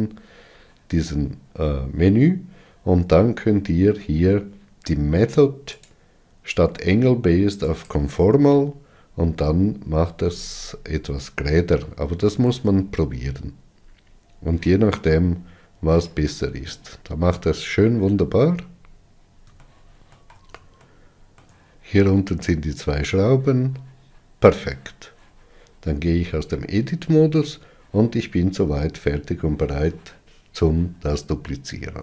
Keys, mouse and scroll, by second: 8.3-26.4 drag, 26.4 Tab, 27.4-27.7 scroll down 3.